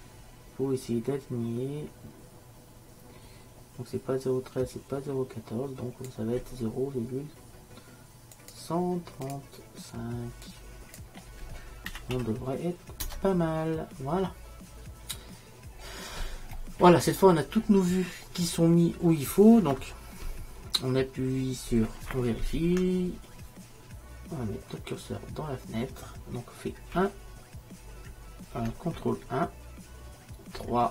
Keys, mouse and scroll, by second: 8.4-15.8 drag, 15.8-17.7 middle drag, 19.4-20.5 middle drag.